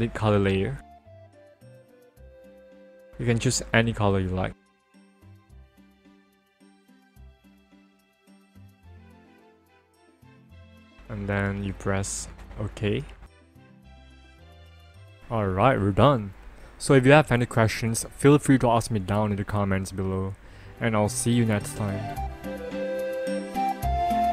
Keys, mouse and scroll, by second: 0.2 click, 1.7 click, 6.1 click, 7.3 click, 11.5 click, 13.9 ctrl+=.